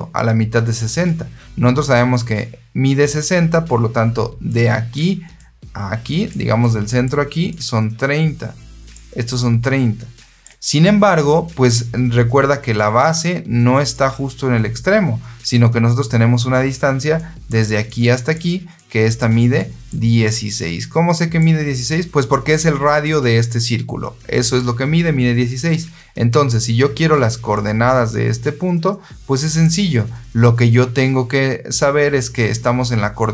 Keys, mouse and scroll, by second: 4.4 click, 5.2 click, 6.5 click, 7.4-8.8 drag, 9.2-10.3 drag, 12.8-13.8 drag, 17.1 click, 17.8 click, 18.7 click, 19.5 click, 20.2-21.3 drag, 27.4-29.5 drag.